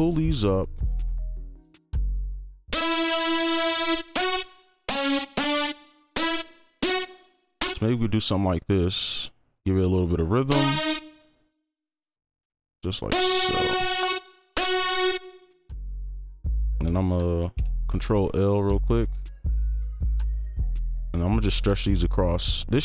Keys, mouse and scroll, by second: 4.4 right click, 5.3 double click, 7.1 right click, 7.9 ctrl+click, 9.6 right click, 10.1 ctrl+click, 11.0 right click, 11.2 ctrl+click, 12.7 right click, 16.0 ctrl+2, 16.4 ctrl+3, 16.7 ctrl+4, 16.8 ctrl+a, 17.5 ctrl+l, 18.2 right click, 20.2 ctrl+click.